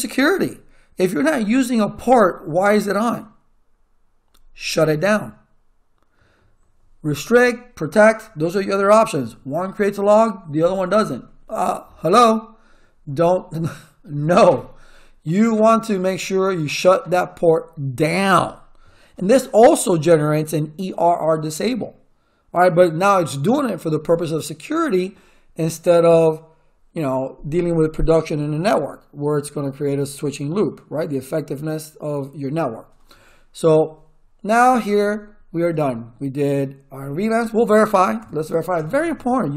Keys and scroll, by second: 38.2 ctrl+z, 38.7 Return.